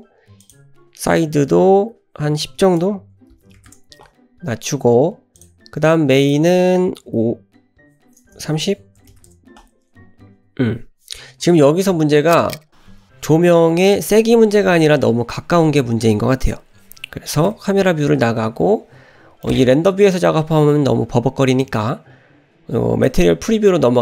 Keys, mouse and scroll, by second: 0.4-4.4 drag, 5.4 click, 6.2-9.6 drag, 8.5 BackSpace, 17.5 KP_0, 19.4-19.9 middle drag, 23.6 click.